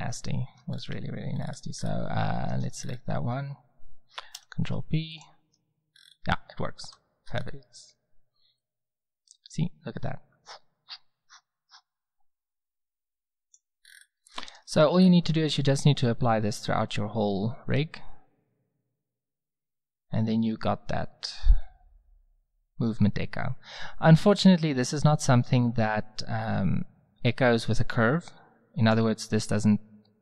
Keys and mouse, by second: 0.7-1.1 drag, 1.4 click, 4.3 ctrl+p, 5.5 Tab, 6.8 z, 13.8-14.3 middle drag, 16.1-18.0 drag.